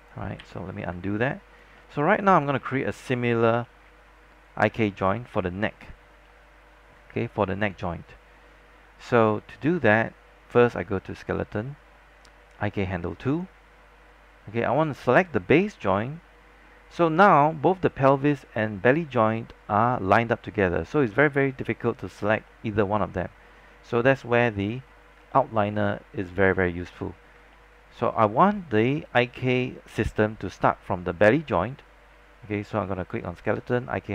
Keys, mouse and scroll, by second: 0.5 z, 0.8 scroll down 1, 1.2 alt+click, 1.9 alt+middle click, 2.1 alt+middle click, 2.2-3.6 alt+scroll up 2, 3.6 alt+middle click, 4.5 scroll down 1, 4.9 alt+click, 6.3 alt+middle click, 8.5-8.9 scroll up 1, 9.1 alt+middle click, 11.3-14.4 drag, 22.0 scroll up 1, 22.6 alt+middle click, 23.6 scroll down 1, 27.6 alt+middle click, 33.4-34.1 drag.